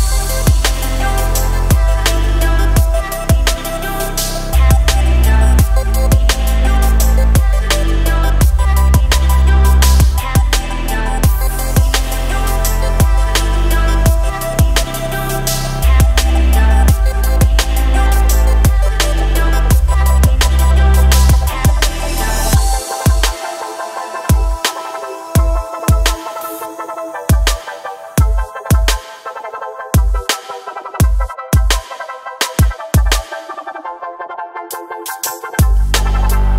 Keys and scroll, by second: 6.4 Delete, 18.8 Tab, 24.2 |, 25.2 Escape, 26.2 e, 26.5 Escape, 27.6 s, 29.4 ctrl+z, 32.1 ctrl+b.